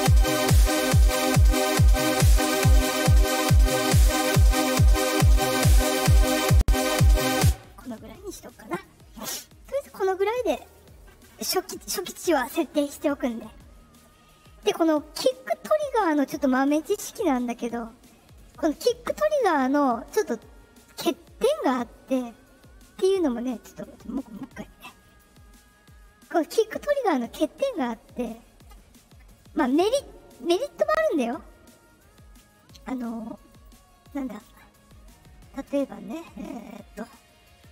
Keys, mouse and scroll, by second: 2.3-7.1 drag, 7.3 space, 8.5 click, 9.8 click, 11.9 click, 24.2 click, 25.0 click, 27.2 click, 28.1 click, 29.3-29.8 drag, 30.3-30.7 drag, 32.5 click, 33.4 click, 34.3 click, 36.5 click.